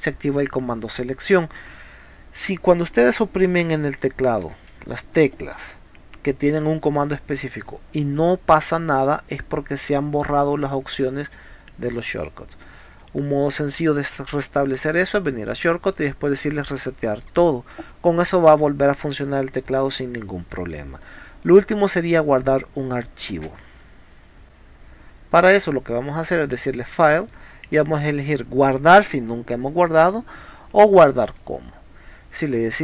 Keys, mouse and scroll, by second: 4.0 e, 4.5 r, 10.6 click, 12.9 click, 15.1 click, 17.1 click, 20.5 click, 23.4 space, 26.7 click, 31.3 click.